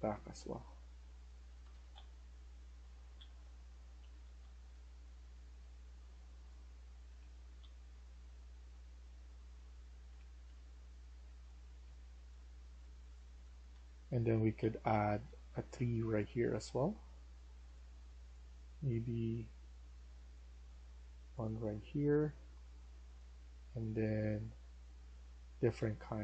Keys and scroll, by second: 1.4 Escape, 1.6 Escape, 1.8-8.7 typing, 9.8-15.3 typing, 25.6-26.2 typing.